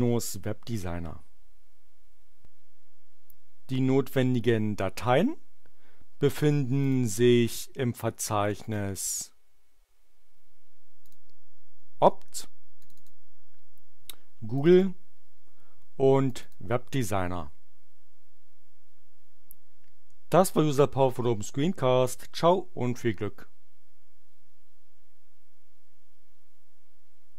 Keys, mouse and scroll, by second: 6.8 click, 8.4 click, 11.0 click, 12.8 click, 14.5 click, 16.3 click.